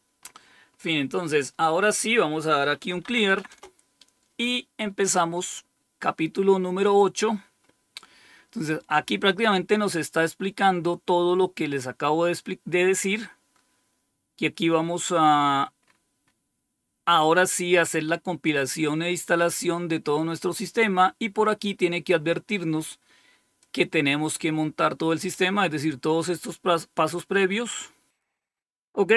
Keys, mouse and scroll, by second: 0.1-1.4 scroll up 3, 1.4-2.3 scroll down 2, 2.3-2.8 scroll down 1, 2.6-3.7 typing, 4.8-5.6 scroll up 1, 6.8 click, 7.7 typing, 10.4-12.1 scroll down 1, 12.1-12.9 scroll down 1, 12.9-15.8 scroll down 1, 15.8-16.3 scroll up 3, 23.5 click, 27.2-28.2 scroll down 4.